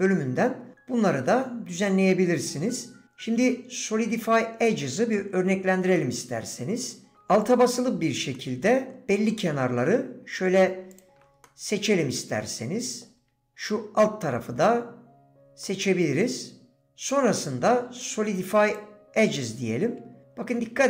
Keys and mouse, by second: 6.0 click, 8.3 click, 10.9 alt+shift+click, 11.4-13.0 drag, 15.6 click.